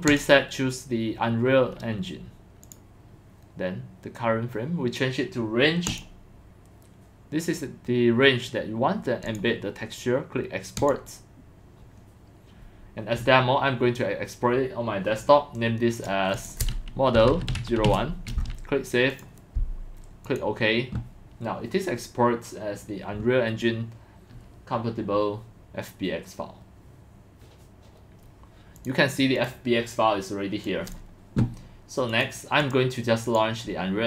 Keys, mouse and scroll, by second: 0.1 click, 2.6 click, 5.9 click, 6.9 drag, 9.3 click, 10.8 click, 16.0 click, 16.3 click, 16.9-18.4 typing, 18.4 middle click, 19.1 click, 19.2 click, 20.3 click, 28.8 click, 28.9 drag, 29.4 click, 30.6 click, 32.1 click, 32.6 drag, 33.3 click.